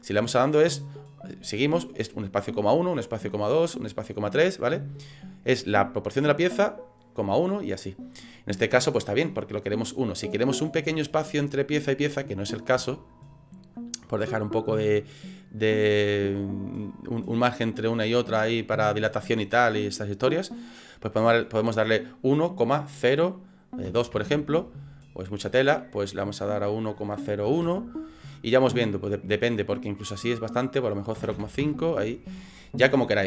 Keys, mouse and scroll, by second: 0.8 click, 2.6 click, 3.6 click, 5.2 click, 5.5 click, 5.7 click, 10.5-10.8 scroll up 5, 11.1 shift+middle click, 12.3-12.7 scroll up 5, 12.9 shift+middle click, 14.9 click, 25.5 click, 29.6 click, 33.1 click.